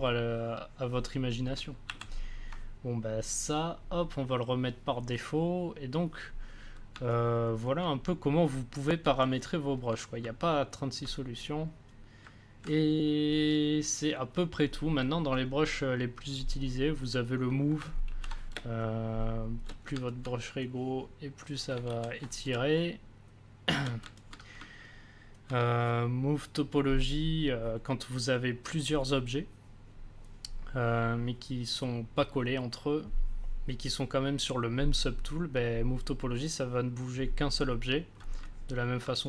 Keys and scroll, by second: 1.8 ctrl+z, 18.0 ctrl+z, 18.5 space, 21.8 ctrl+z, 22.5 z.